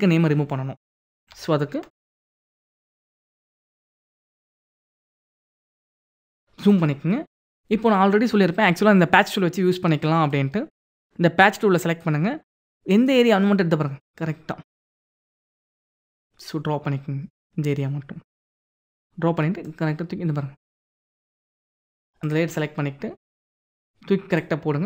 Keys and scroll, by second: 2.9 ctrl+=, 3.5 ctrl+=, 5.7 ctrl+=.